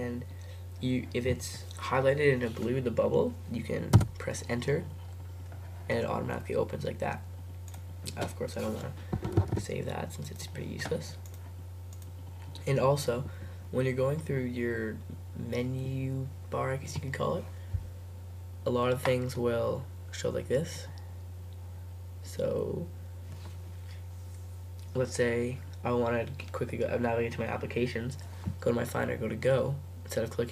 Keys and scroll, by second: 4.0 Return, 9.4 super+q.